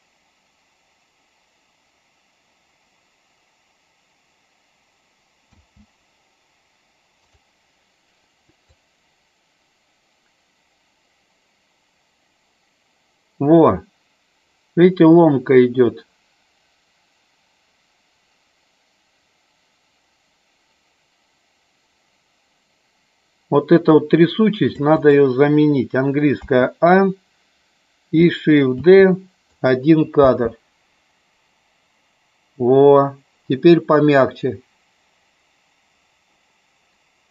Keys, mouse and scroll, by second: 5.4 space, 7.2 click, 8.5-24.8 drag, 26.3 a, 28.7 shift+d, 29.4 click, 30.0 space.